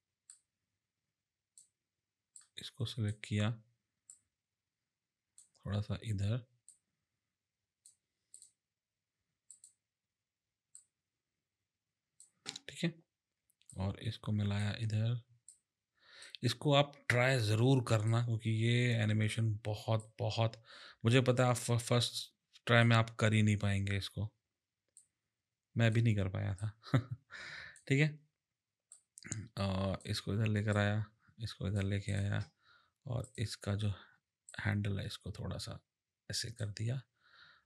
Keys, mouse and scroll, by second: 0.3 click, 4.1 click, 6.7 click, 8.3 click, 9.5 click, 10.8 click, 13.7 click, 15.5 click, 18.1 click, 20.0 click, 24.9 click, 26.6 click, 28.9 click, 30.7 click, 32.0 click, 33.2 click, 34.5 click.